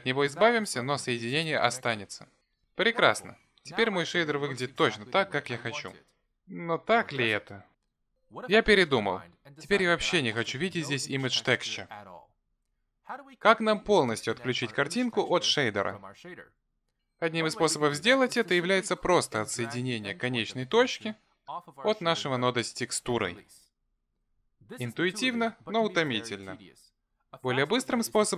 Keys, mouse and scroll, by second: 5.1 Delete, 19.6 click.